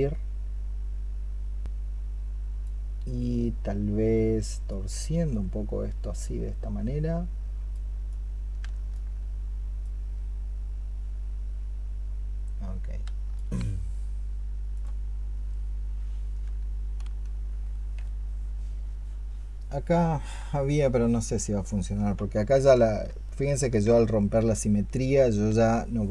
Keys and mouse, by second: 22.9 ctrl+z.